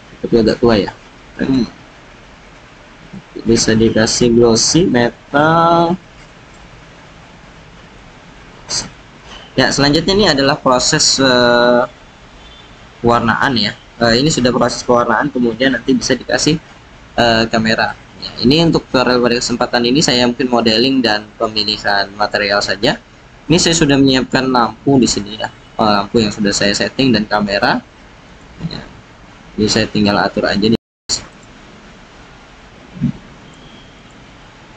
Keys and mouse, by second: 2.3 click, 4.9 click, 8.0 click, 10.7-12.9 drag, 13.0-21.0 drag, 28.2 click, 33.4 click, 33.9 click.